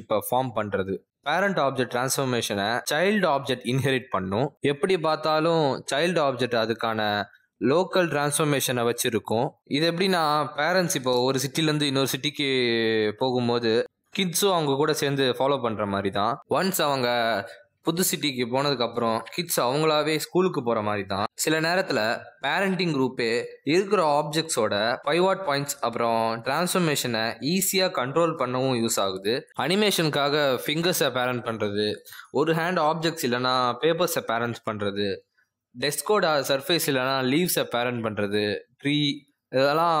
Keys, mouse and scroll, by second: 0.0-2.3 typing, 0.4 click, 1.3 click, 3.4-7.8 typing, 5.1 click, 5.8 click, 6.6 click, 7.7 click, 9.0 r, 31.1 r, 31.5 middle click, 32.1 click, 32.3 r, 32.7 shift+middle click, 32.8 r, 33.3-33.8 scroll down 2, 33.4 middle click, 33.9 click, 33.9-40.0 typing, 34.0 click, 34.1 click, 34.5 click, 35.0 click, 35.3 middle click, 35.3 shift+middle click, 35.4 scroll up 2, 35.5 shift+middle click, 35.6 click, 35.7 middle click, 36.3 click, 36.8 shift+middle click, 36.9 click, 37.0 shift+click, 37.1 shift+click, 37.5 click, 38.1 click, 38.5 click, 38.9 click, 39.1 click.